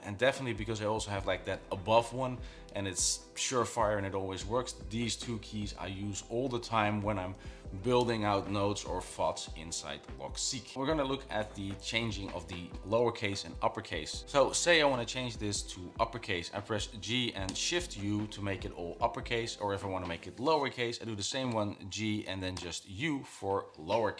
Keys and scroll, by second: 17.2-17.9 typing, 21.9 g.